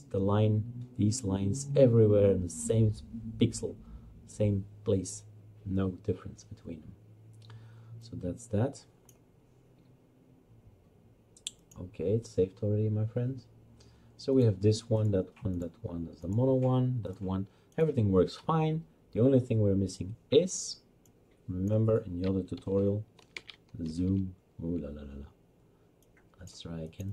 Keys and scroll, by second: 22.6-24.0 typing.